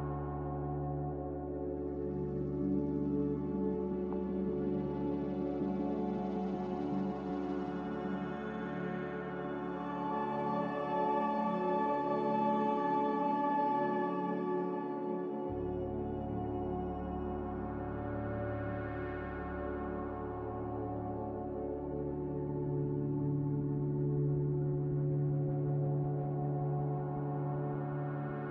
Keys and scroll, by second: 7.4 ctrl+g, 25.7 b.